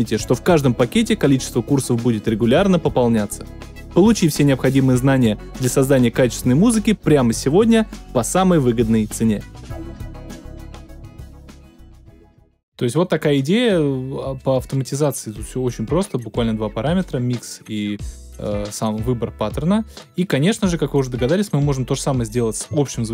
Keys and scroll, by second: 12.6 space.